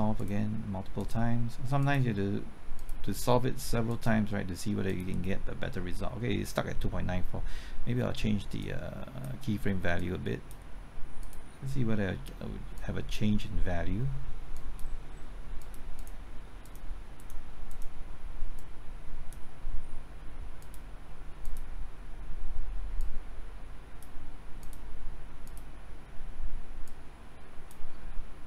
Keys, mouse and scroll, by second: 15.6 KP_Enter.